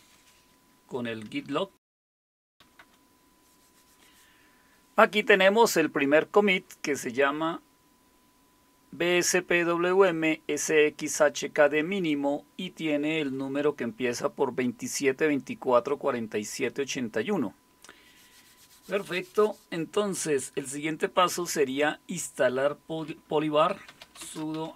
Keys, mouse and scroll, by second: 1.3-3.1 typing, 23.6-24.7 typing.